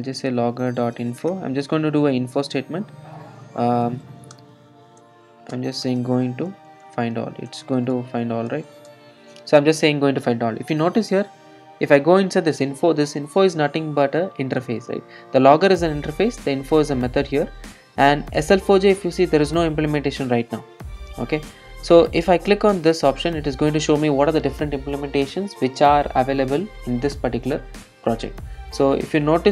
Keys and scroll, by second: 12.0 super+b.